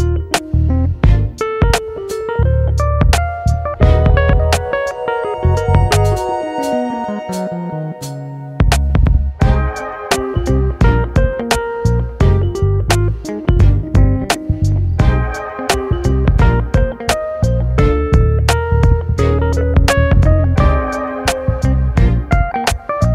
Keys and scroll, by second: 1.2 ctrl+z, 1.5 ctrl+z, 20.7 Delete.